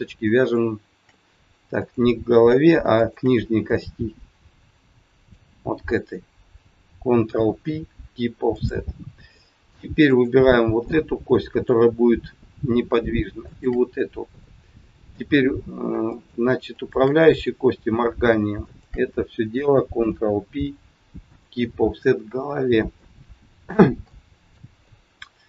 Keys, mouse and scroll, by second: 0.4 shift+click, 1.8 shift+click, 3.2 shift+click, 3.6 middle click, 7.3 ctrl+p, 9.3 middle click, 10.1 click, 10.8 middle click, 13.4 shift+click, 14.4 middle click, 16.1 shift+click, 16.7 shift+click, 17.2 scroll down 2, 17.8 scroll down 1, 18.6 shift+click, 20.1 ctrl+p, 22.5-22.9 scroll down 2, 23.0 middle click, 23.9 shift+middle click, 23.9-24.4 shift+scroll up 1, 24.8 middle click.